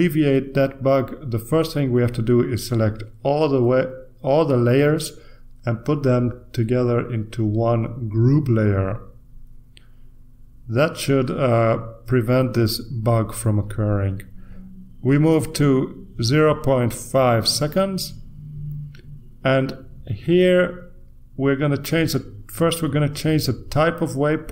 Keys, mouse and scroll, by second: 1.6-4.8 drag, 6.0-7.9 drag, 9.4 click, 19.3 click.